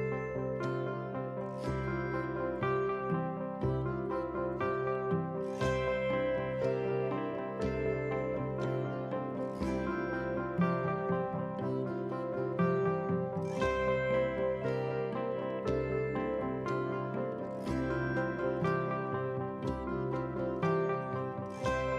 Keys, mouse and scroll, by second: 3.1 shift+click, 4.3 ctrl+t, 5.5 click, 8.7 alt+scroll up 1, 10.0 click, 13.3 ctrl+t, 14.5-16.8 alt+drag, 17.5-21.9 drag.